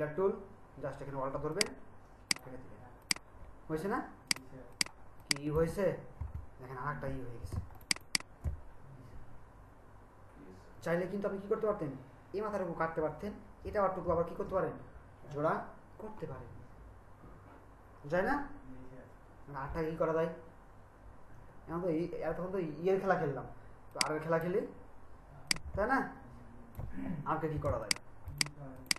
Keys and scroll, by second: 6.2 BackSpace, 7.5 ctrl+alt+space, 27.7 ctrl+alt+shift+space.